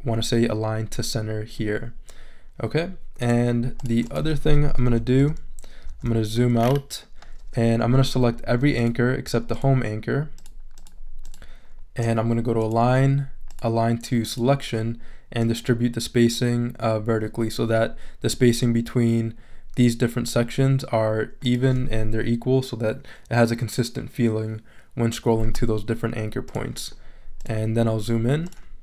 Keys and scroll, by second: 4.9 super+-.